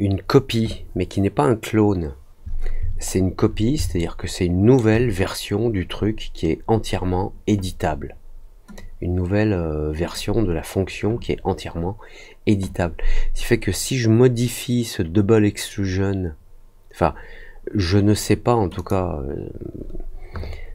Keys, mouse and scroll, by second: 3.0 alt+middle click, 3.9 alt+middle click, 8.7-10.1 drag, 18.7 click.